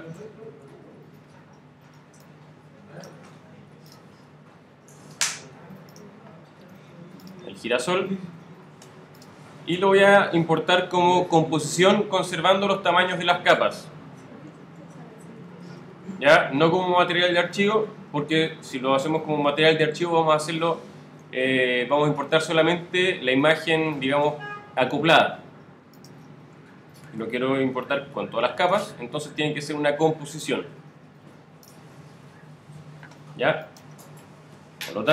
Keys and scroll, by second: 0.1 shift+super+i, 18.7 alt+shift+super+-, 20.0 alt+shift+super+-, 27.9 alt+shift+super+-, 34.5 alt+shift+super++.